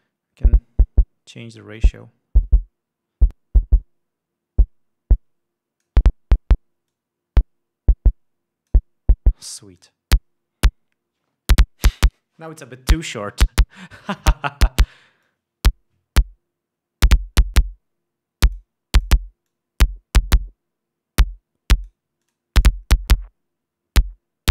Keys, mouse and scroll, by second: 2.1-6.6 drag, 7.5 click, 10.3 click, 15.8-19.3 drag, 19.5 click, 20.0-22.6 drag, 22.8 click, 23.2-24.5 drag.